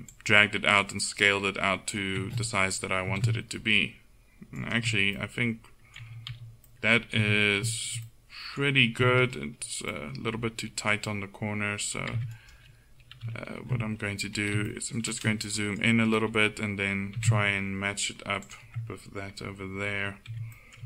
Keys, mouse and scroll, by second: 0.2-2.0 drag, 3.1 s, 5.3-6.4 middle drag, 6.4 z, 7.2 Tab, 9.0 z, 12.2 Tab, 13.2 KP_1, 17.2 s, 20.3 Tab.